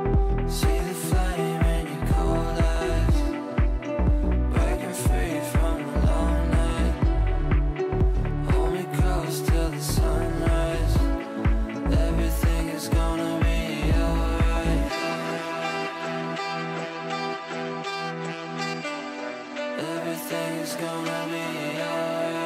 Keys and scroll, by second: 5.0 Delete, 11.3 Delete, 16.8 Delete.